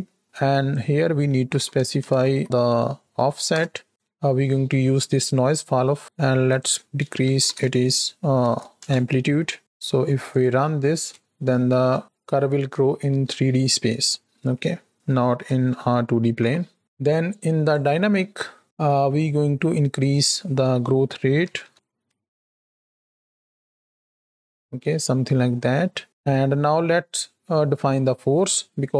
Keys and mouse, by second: 0.3-5.0 drag, 3.0 Down, 5.5 click, 6.3-8.7 drag, 10.1 click, 10.8 space, 11.8 KP_1, 12.6 shift+click, 13.9-14.9 middle drag, 15.1 space, 16.3 KP_7, 17.5 click, 18.8 middle click, 19.9-21.7 drag, 21.7 shift+Right, 21.7 shift+Left, 22.0 space, 26.0 space.